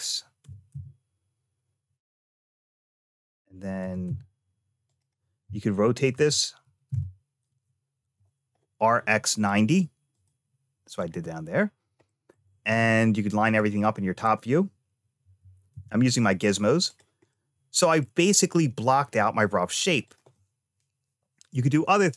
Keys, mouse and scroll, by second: 0.3 g, 3.7 g, 6.0 r, 10.0 click, 10.8 click, 11.9 middle click, 12.5 `, 15.0 g, 17.1 middle click, 19.9 click.